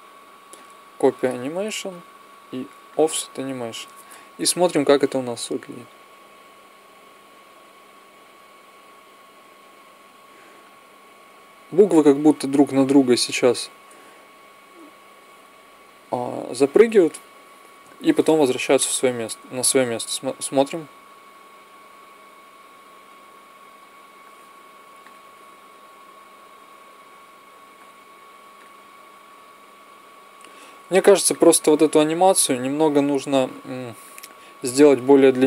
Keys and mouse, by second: 0.3-4.3 drag, 4.3 Right, 5.0 Right, 5.6 Right, 6.3 Right, 7.0 Right, 7.7 Right, 13.9 Left, 19.9 alt+a, 24.8-26.8 drag, 31.2-32.9 drag, 33.8 click.